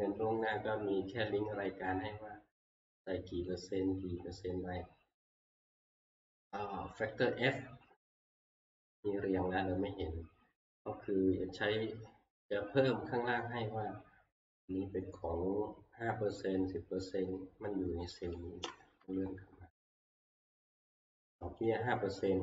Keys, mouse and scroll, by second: 1.8 click, 3.6 click, 7.2 click, 8.4 click, 8.7-9.4 scroll, 12.3 scroll, 13.1-13.5 scroll, 14.8 scroll, 15.5-16.7 scroll, 17.1 scroll, 18.4 click, 19.1-20.3 Left, 21.6 click.